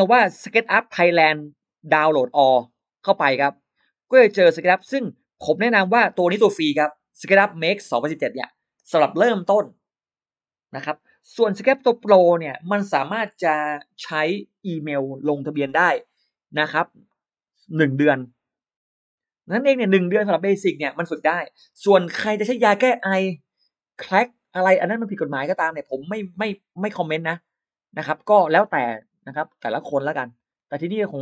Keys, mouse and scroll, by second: 3.6 click.